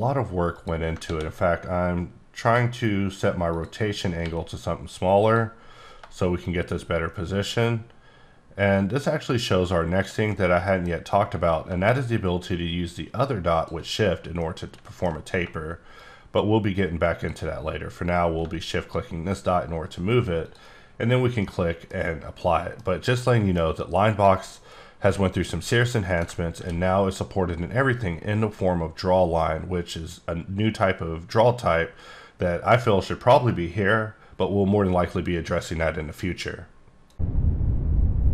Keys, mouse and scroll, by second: 0.5 click, 1.1 ctrl+d, 2.4 click, 3.5 click, 4.2 r, 5.2-10.2 drag, 10.3 middle click, 11.9 shift+click, 14.4 middle click, 16.0 shift+click, 20.4 click, 21.1-21.4 scroll down 1, 21.4 middle click, 22.4 middle click, 23.0 scroll down 1, 23.2 middle click, 23.6 scroll down 1, 26.6 ctrl+d.